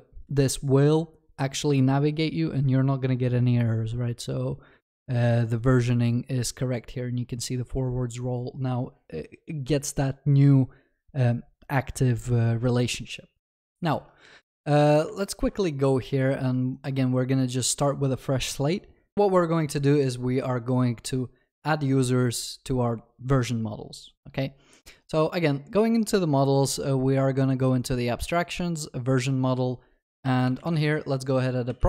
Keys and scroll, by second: 15.5 alt+w, 31.0 Tab.